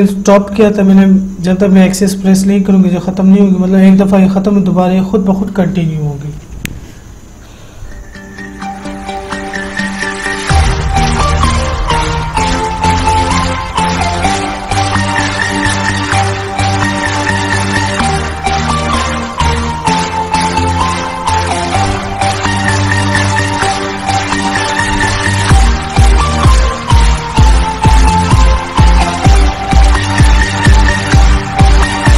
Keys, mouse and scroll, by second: 5.3 F5.